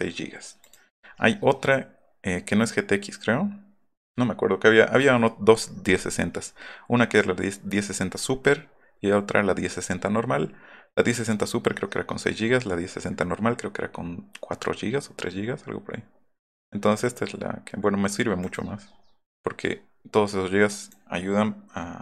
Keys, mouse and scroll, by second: 20.7 click.